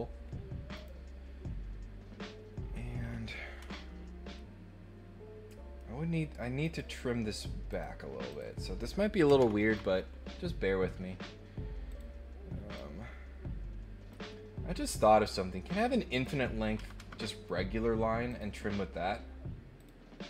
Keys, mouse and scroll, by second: 0.7 click, 4.3-5.7 middle drag, 6.6 click, 7.7 click, 8.3 click, 11.9 click, 12.7-14.1 drag, 16.1 click, 17.3 right click, 18.2 click, 19.7 click.